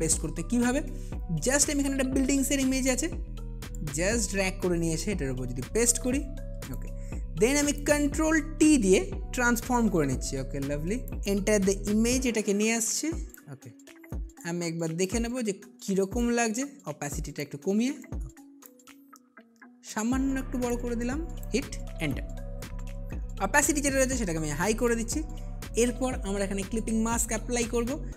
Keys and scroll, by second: 9.0 ctrl+t.